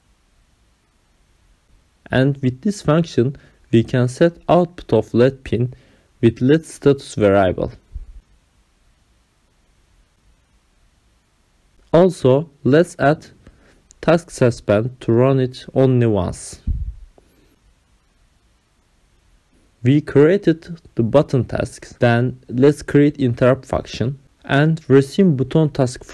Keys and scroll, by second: 0.3 ctrl+alt+7, 0.7 Return, 1.0-5.8 typing, 3.9 Return, 6.3 Up, 6.4 Return, 6.8-15.1 typing, 16.4-18.5 typing, 18.2 Right, 19.0 Down, 19.6-22.7 typing, 23.3 ctrl+s, 24.3 Return, 24.7 Up, 24.8-26.1 typing.